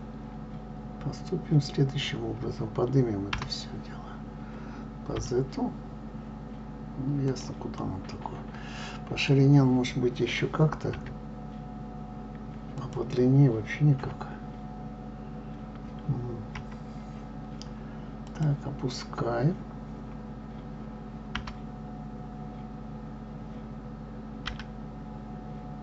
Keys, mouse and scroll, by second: 3.3 g, 7.7-10.9 middle drag, 10.9 s, 13.9 KP_3, 18.1 click, 21.3 g.